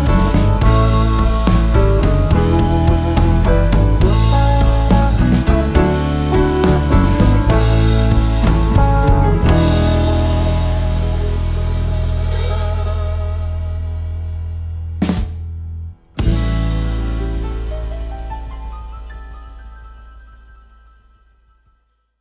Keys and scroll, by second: 0.5 b, 1.2 s.